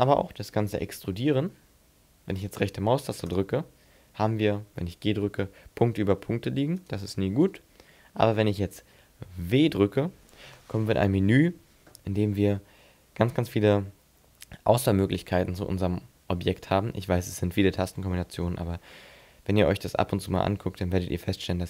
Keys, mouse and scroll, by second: 1.0 e, 3.4 right click, 5.2 g, 6.9 right click, 9.7 w.